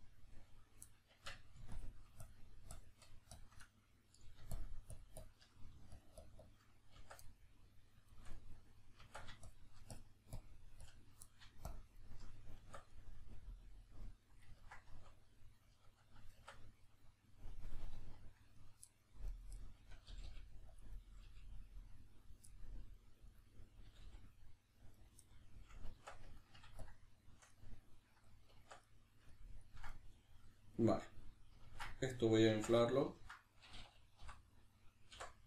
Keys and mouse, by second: 1.1 Tab, 1.7 shift+click, 3.7 middle click, 4.5 shift+click, 7.0 b, 7.3-9.5 middle drag, 9.0 Tab, 9.5 shift+click, 11.3 middle click, 11.7 shift+click, 12.6 b, 12.9-18.6 middle drag, 15.0 \, 16.4 Tab, 18.6 right click, 18.9 middle click, 19.3 right click, 19.6-20.8 middle drag, 20.1 g, 20.8 click, 20.9 right click, 21.1 g, 22.3 click, 22.5 middle click, 23.3 right click, 23.9 g, 25.1 right click, 25.3-28.8 middle drag, 26.0 Tab, 26.8 shift+click, 28.6 b, 32.4 Tab, 32.8 ctrl+middle click.